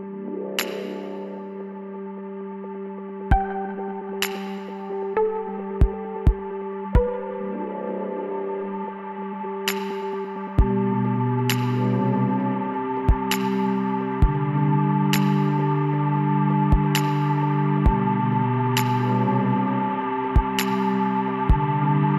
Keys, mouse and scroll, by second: 3.3 ctrl+z, 3.8 ctrl+z, 6.3-8.4 middle drag, 9.3-11.1 drag, 11.8 s, 17.2 s, 19.8-21.9 middle drag.